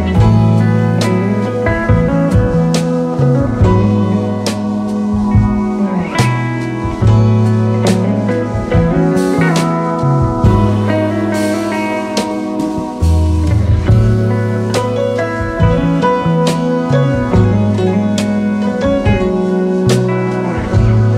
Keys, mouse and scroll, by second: 8.5-11.9 drag, 12.8 alt+scroll up 2, 13.9-14.4 alt+scroll up 1.